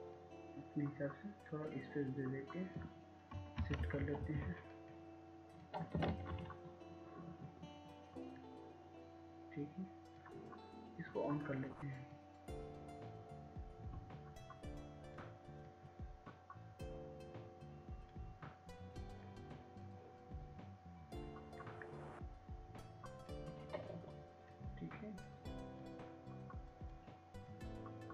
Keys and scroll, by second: 5.9 Left, 6.2 Left, 6.5 Left, 8.4 Left, 8.4 ctrl+z.